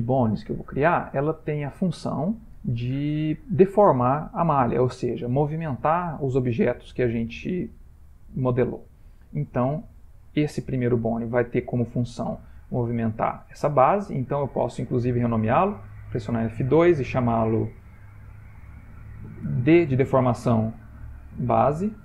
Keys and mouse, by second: 7.9 shift+middle click, 14.1 click, 15.8 F2.